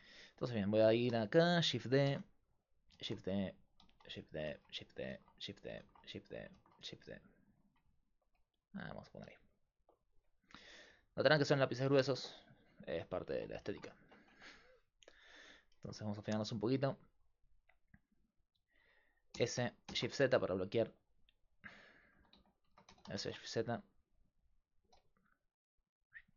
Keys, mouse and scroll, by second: 2.1-6.6 typing, 2.9 click, 5.8-7.3 drag, 14.3 Tab, 19.4 s, 21.6 z, 22.2 a, 22.4 a, 22.7 s, 24.8 z.